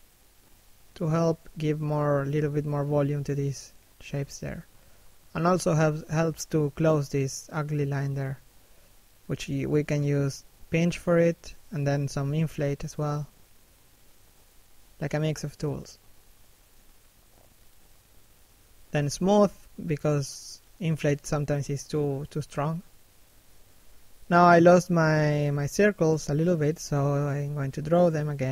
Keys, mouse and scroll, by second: 0.1 middle click, 0.9 shift+middle click, 1.5 click, 4.0 click, 4.9 shift+middle click, 5.3 click, 5.9 click, 6.2 scroll down 1, 6.4 middle click, 7.9-8.3 scroll up 1, 8.3 p, 8.5 scroll down 1, 8.8 click, 10.8 shift+f, 11.4 click, 14.9 i, 15.2 click, 16.2 click, 18.2 scroll down 1, 18.4 middle click, 18.9 shift+middle click, 19.2 middle click, 20.0 shift+middle click, 20.2 scroll up 1, 20.5 middle click, 21.0 scroll up 1, 21.1 scroll down 1, 21.3 middle click, 22.2 f, 22.5 click, 23.9 f, 24.3 click, 25.8 f, 26.3 right click, 26.5 scroll up 1, 26.7 middle click, 27.3 click.